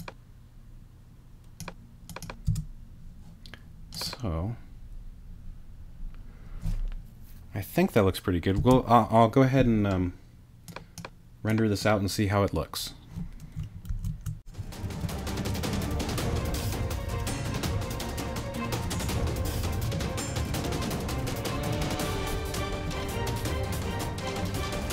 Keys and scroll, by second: 2.5 space, 8.6 space, 13.9 shift+super+s, 14.3-15.4 typing, 16.5-20.3 typing, 16.6 super+r, 20.4 shift+super+r, 21.4 shift+space, 21.9 shift+0, 22.0 shift+super+r, 23.4-24.9 typing.